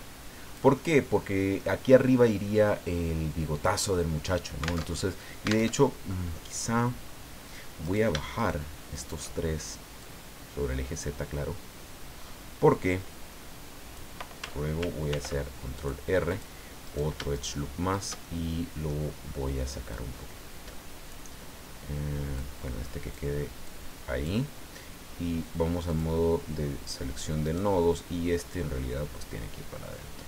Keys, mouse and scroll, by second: 0.7-1.7 middle drag, 4.8 alt+Tab, 5.7 alt+Tab, 7.8 shift+right click, 8.3 shift+right click, 8.9 shift+right click, 10.0-14.1 drag, 15.1 ctrl+r, 15.7 click, 16.3 click, 16.8 right click, 17.3 shift+right click, 17.9 shift+right click, 18.2 shift+middle click, 19.9-21.3 drag, 22.4 click, 23.6 click, 25.9 click, 27.4 right click, 28.5-30.2 drag.